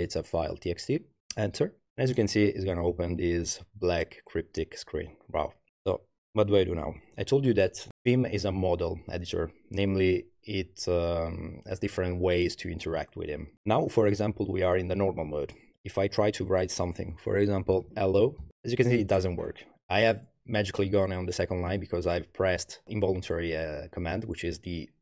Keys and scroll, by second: 1.2 Return, 17.5-19.0 typing.